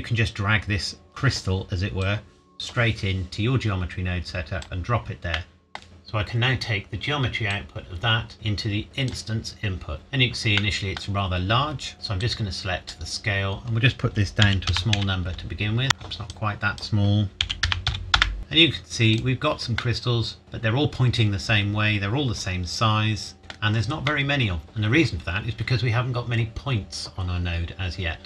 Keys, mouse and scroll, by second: 2.0-4.8 drag, 5.4 middle click, 7.5 click, 10.6 middle click, 11.2-11.5 scroll down 1, 12.2 click, 14.4 KP_Decimal, 14.7 KP_0, 15.0 KP_1, 15.8 KP_Enter, 16.3 click, 17.4 KP_Decimal, 17.6 KP_0, 17.9 KP_5, 18.2 KP_Enter, 18.4 click, 19.8 middle click, 24.0 scroll up 1, 24.0 middle click, 27.2-27.9 scroll down 1.